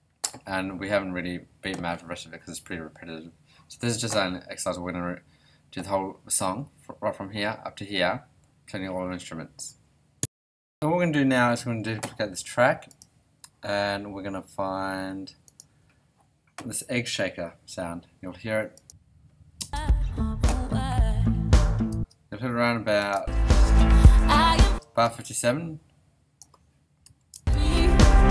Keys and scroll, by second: 19.6 space, 21.9 space, 23.1 space, 24.6 space, 27.0 ,, 27.3 space.